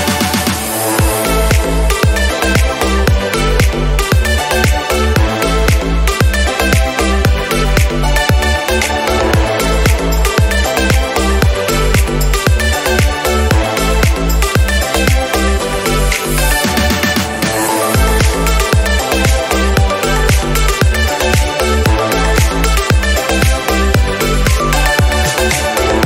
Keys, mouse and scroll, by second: 0.3 click, 0.7 KP_0, 2.3 click, 2.6-3.3 scroll down 6, 2.9 click, 3.3-4.9 drag, 4.9-6.1 middle drag, 5.2-8.0 drag, 8.8 shift+click, 11.4 click, 12.4 click, 12.8 click, 13.9 KP_7, 14.1 scroll up 2, 14.3 click, 14.7 g, 20.2 g, 21.5 click, 21.9 click, 24.8 click.